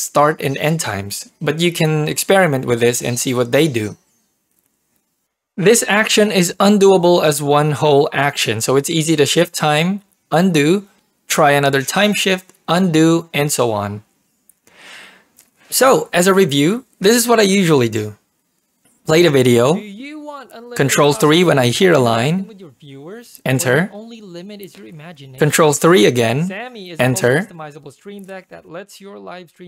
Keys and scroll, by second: 10.3 ctrl+z, 16.2 1, 19.1 ctrl+3, 19.4 ctrl+p, 23.1 Return, 26.2 ctrl+3, 27.1 Return.